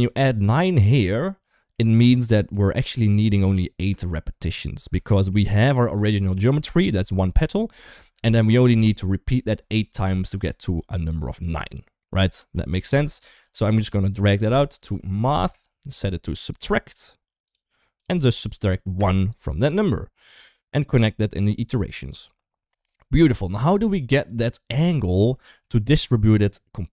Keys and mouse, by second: 1.6 middle click, 4.9 shift+middle click, 12.4 middle click, 13.3 click, 14.1-15.7 drag, 16.1 click, 16.6-17.3 drag, 17.8-18.8 drag, 19.1 click, 20.3-21.3 drag, 23.5 shift+drag, 24.1 click, 24.7 click, 26.0-26.9 drag.